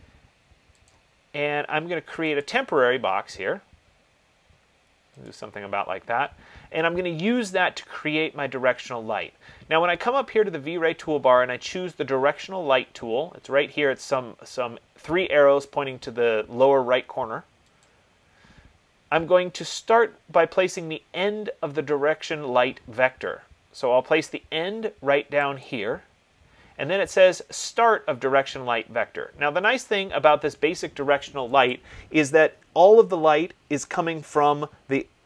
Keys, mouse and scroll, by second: 1.1 click, 2.6 click, 5.4 click, 10.4 click, 18.0-23.1 drag, 25.9-35.2 drag.